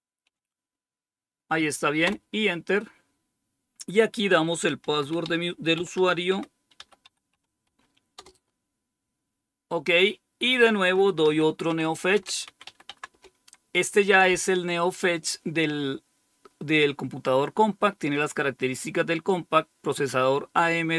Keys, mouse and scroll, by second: 0.0-0.2 typing, 1.9 typing, 4.6 typing, 5.6-8.6 typing, 11.4-13.1 typing, 19.2 click.